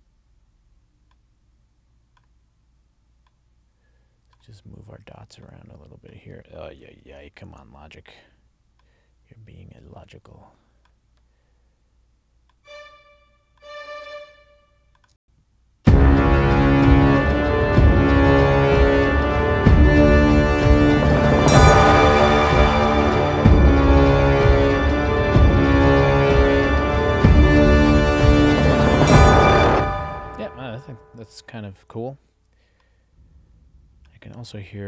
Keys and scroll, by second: 6.8 super+z, 15.2 space, 29.7 space.